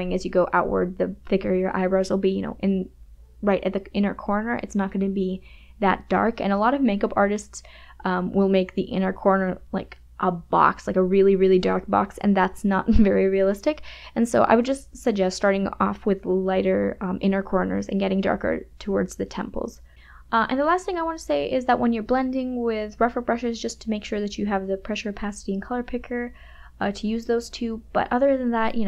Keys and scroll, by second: 0.3 KP_Subtract, 2.4 space, 5.1 KP_Subtract, 5.7 space, 16.5 ], 18.3 KP_Subtract, 18.9 KP_Add, 19.3 space, 19.8 [, 22.7 ], 24.0 [, 26.5 KP_Subtract, 27.5 KP_Add.